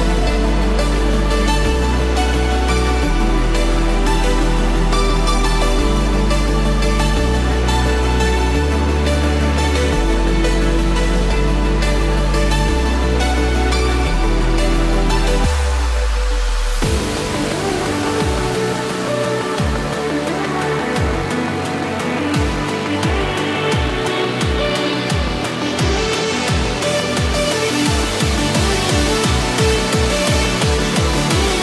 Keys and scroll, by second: 7.3 ctrl+d, 8.2 ctrl+-, 16.1 ctrl+d, 19.2 ctrl+d, 20.4 ctrl+d, 22.0 ctrl+d, 23.9 ctrl+d, 24.5 ctrl+-, 25.0 ctrl+z, 25.9 ctrl+=, 27.0 ctrl+-, 29.8 ctrl+=, 30.7 ctrl+d, 31.5 ctrl+z.